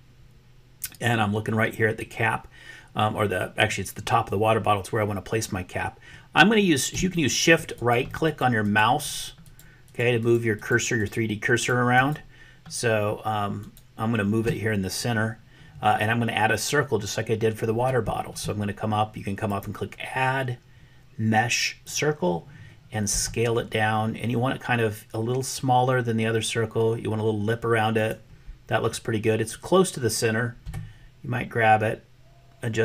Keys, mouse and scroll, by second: 7.2 shift+click, 7.9 shift+click, 8.3 shift+click, 8.7 shift+click, 9.5 shift+click, 9.9 shift+click, 10.3 shift+click, 10.6 shift+click, 11.0 shift+click, 11.5 shift+click, 12.0 shift+click, 13.8 shift+click, 19.6-22.0 drag, 23.2 s, 30.6 g.